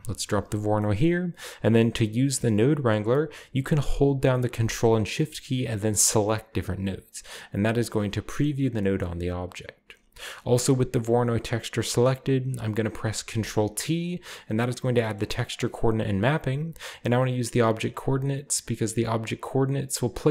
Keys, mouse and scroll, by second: 0.3 click, 6.2 ctrl+shift+click, 6.8 ctrl+shift+click, 7.5 ctrl+shift+click, 7.9-8.6 ctrl+shift+drag, 8.6-9.4 scroll down 2, 9.0-9.4 middle drag, 9.4-12.5 drag, 13.3 ctrl+t, 14.6-15.6 middle drag, 14.7-16.3 scroll up 1, 15.5-16.4 drag.